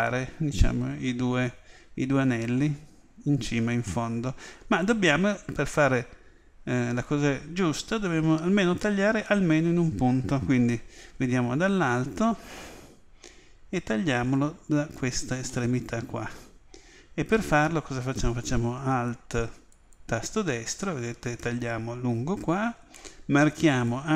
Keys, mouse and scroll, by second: 3.9-7.0 middle drag, 15.5-17.4 middle drag, 19.7-21.6 right drag, 23.7 click.